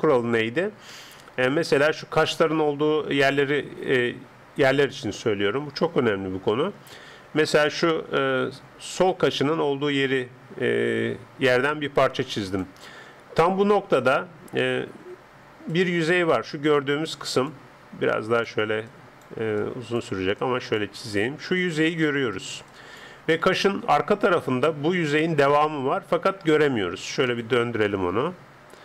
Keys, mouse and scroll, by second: 0.5-6.9 middle drag, 7.3-9.0 d, 9.0 click, 12.7 d, 13.3 d, 13.4-15.3 middle drag, 14.8-23.9 d, 15.7 click, 18.1-25.1 drag, 25.0 d, 26.8-28.8 middle drag.